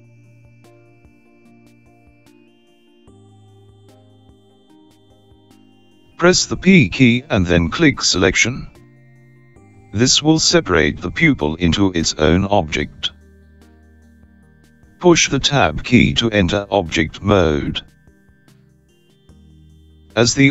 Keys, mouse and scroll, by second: 10.9 p, 18.9 Tab.